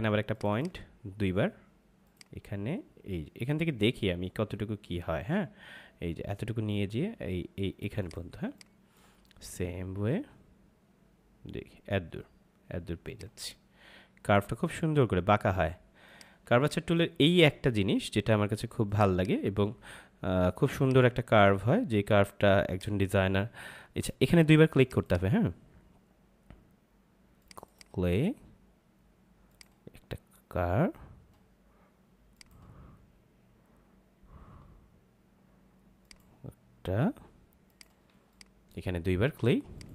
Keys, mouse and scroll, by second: 0.3 click, 7.9 click, 8.3 space, 8.5 click, 9.1 space, 13.0 click, 16.0 click, 16.4 space, 16.5 click, 17.1 space, 18.8 click, 32.3 click, 36.0 click, 38.0 space, 38.3 click, 38.5 space, 39.7 click.